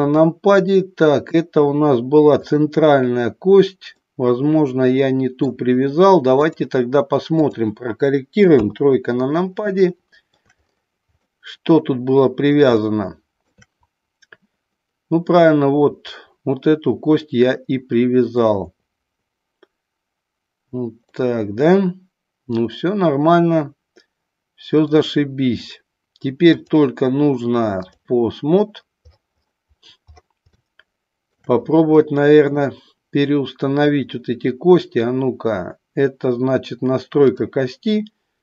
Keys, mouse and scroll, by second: 0.5-1.4 middle drag, 2.4 click, 4.1-5.5 middle drag, 6.4-7.7 drag, 8.7 KP_3, 9.9 shift+middle click, 11.2-12.5 middle drag, 12.9 shift+middle click, 21.2-24.8 middle drag, 26.7-28.0 drag, 30.7-31.3 shift+middle drag, 32.0 middle click, 33.9 click, 37.3 click.